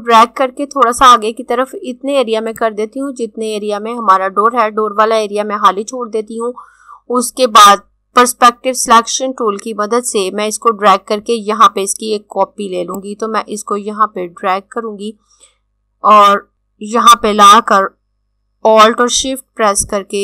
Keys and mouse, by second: 12.4 click.